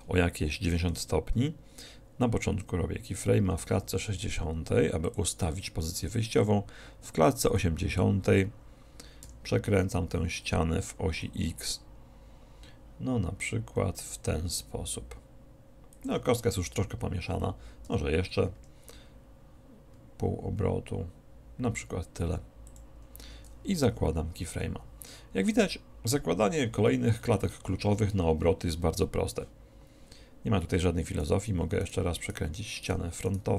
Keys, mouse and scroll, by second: 3.9 i, 7.6-9.3 drag, 9.3 r, 16.2-18.0 drag, 18.0 r, 23.4-24.8 drag, 24.8 i, 31.3-32.9 right drag, 32.9-33.5 middle drag.